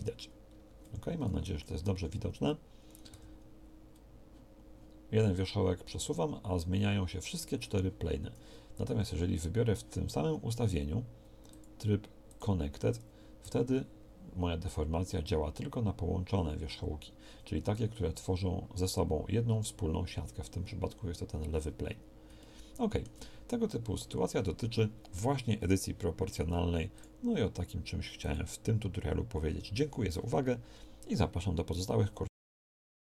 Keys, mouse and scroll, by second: 3.1 g, 13.4 g, 21.9 middle click.